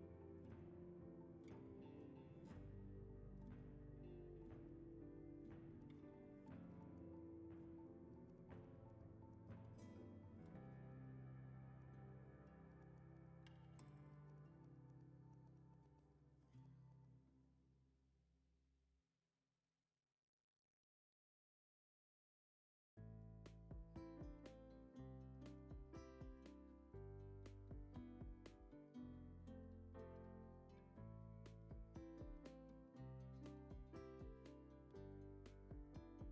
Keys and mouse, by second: 1.2-1.5 drag, 1.8 shift+drag, 2.2 g, 3.3 g, 5.3 click, 6.6 shift+d, 7.7-10.2 typing, 11.4 shift+d, 11.9 s, 12.2 r, 13.3 r, 13.3 g, 15.0 shift+d, 15.4 s, 16.7 s, 17.3 r, 17.9 g, 19.4 click, 19.8 shift+middle drag, 21.7 middle click, 22.2 KP_5, 22.5 middle click, 23.6 shift+middle click, 24.5 ctrl+alt+KP_0, 25.4 click, 25.8 g, 26.7 g, 27.8-28.3 drag, 28.5 shift+click, 28.9 g, 29.9 s, 30.5 g, 31.3 g, 32.5 click, 33.3 drag, 33.6 shift+drag, 33.9 g, 34.4 s, 34.9 g, 35.9-36.3 middle drag.